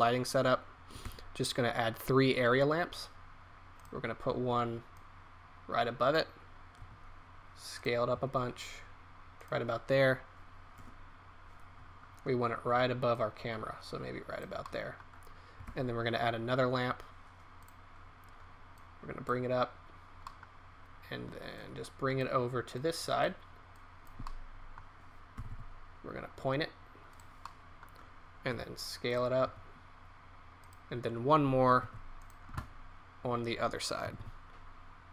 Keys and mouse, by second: 1.0 shift+a, 6.8 s, 8.1 s, 10.7 KP_0, 14.6 middle click, 16.3 shift+a, 25.3 r, 27.5 click, 28.4 s, 29.4 s, 31.8 shift+d, 34.0 r.